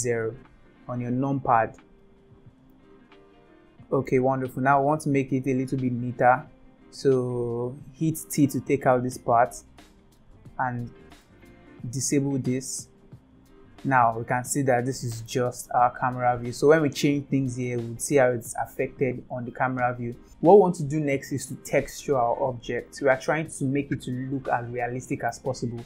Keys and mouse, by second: 2.8-4.0 shift+middle drag, 8.8 t, 12.0 click, 14.3-15.3 shift+middle drag, 16.9 click, 17.3 g.